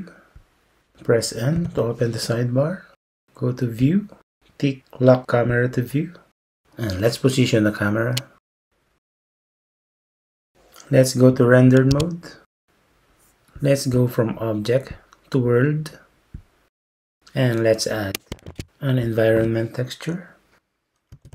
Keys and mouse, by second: 1.6 n, 5.6 click, 11.9 z, 15.0-16.4 drag, 18.5 shift+a.